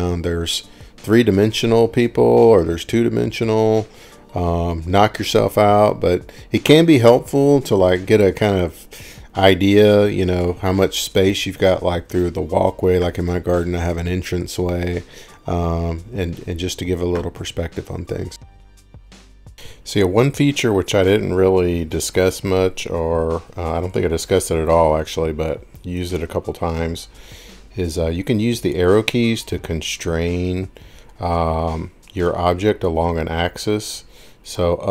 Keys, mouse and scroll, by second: 12.1 Escape, 12.9-13.2 scroll, 14.5-15.0 scroll down 1, 15.0-15.6 scroll down 5, 17.2 scroll down 1, 18.2-19.0 scroll up 4, 19.0 scroll down 6, 19.1-20.6 scroll, 20.8 click, 21.4 scroll up 11, 23.1 click, 23.1 scroll, 28.8 click, 29.1 click, 32.6 scroll, 32.8 scroll down 2, 33.4 scroll.